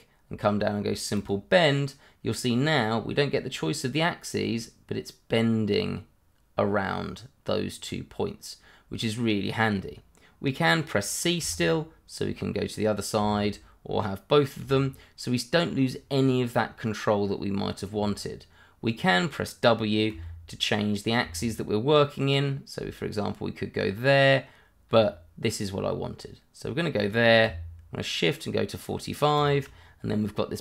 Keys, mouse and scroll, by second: 1.1 click, 11.4 c, 20.1 w, 24.9 w, 29.4 click, 29.7-30.6 scroll down 1.